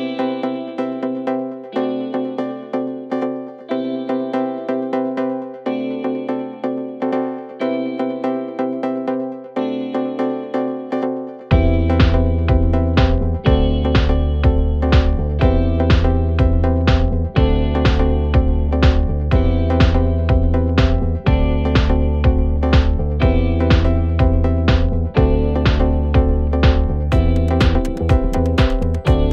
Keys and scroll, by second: 0.5 4, 3.5 ctrl+d, 3.7 Escape, 14.6 ctrl+d, 14.7 Escape, 17.8 3, 20.1 Escape, 20.2 ctrl+z, 23.1 4, 25.4 ctrl+z, 26.8 3, 27.2 4.